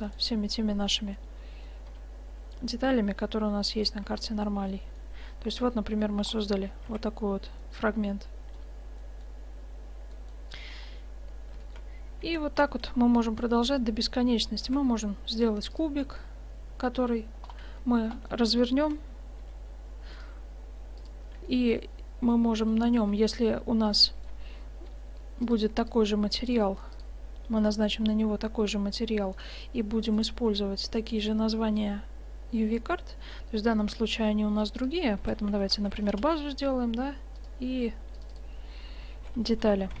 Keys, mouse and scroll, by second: 1.2 middle click, 2.1 g, 3.2-4.5 middle drag, 4.1 Tab, 7.1 shift+z, 12.4 shift+z, 14.7 shift+a, 17.7 Tab, 18.9 y, 19.5 u, 21.6-23.1 middle drag, 23.1 Tab, 25.5-26.2 drag, 28.2 click, 29.4-31.3 right drag, 31.3 middle click, 32.0-33.1 drag, 32.0 right click, 34.7-36.8 drag, 37.4-40.0 drag.